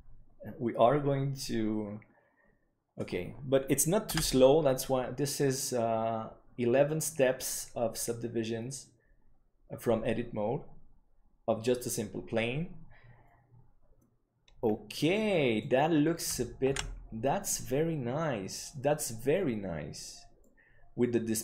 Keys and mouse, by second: 14.9 middle click, 17.4 ctrl+s, 20.3-21.4 middle drag.